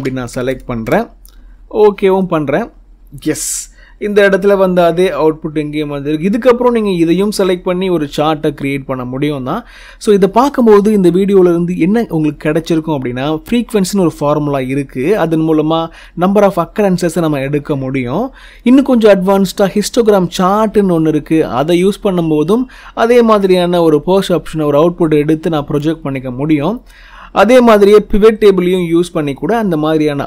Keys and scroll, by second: 1.7 0.